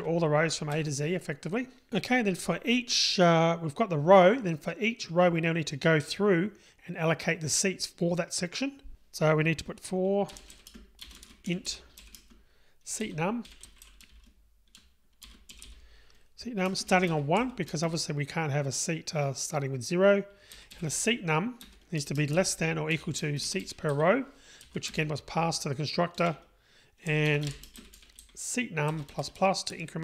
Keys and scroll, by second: 21.7 Return.